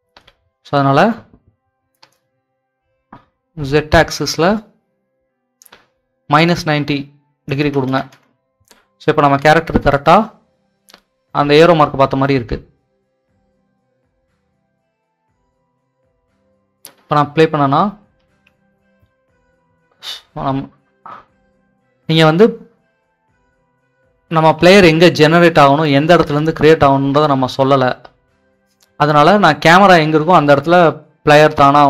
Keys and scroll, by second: 7.6 9, 7.8 0, 9.3 Return, 9.4 w, 11.2-12.1 typing, 18.3 Escape, 20.4-29.1 typing.